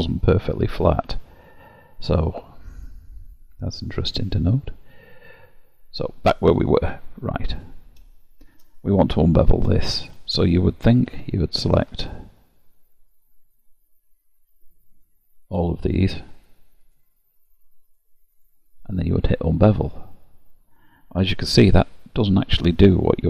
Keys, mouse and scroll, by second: 6.5 scroll up 2, 7.2-7.5 scroll down 1, 7.5 click, 8.2 shift+middle click, 9.5 middle click, 10.2 scroll down 1, 11.2 2, 11.3 click, 12.7 shift+click, 13.1 click, 13.6 click, 15.0 shift+click, 15.3 shift+click, 15.9 shift+click, 16.4 shift+click, 16.9 shift+click, 17.4 shift+click, 17.9 shift+click, 18.4 shift+click, 19.7 click, 21.6 click.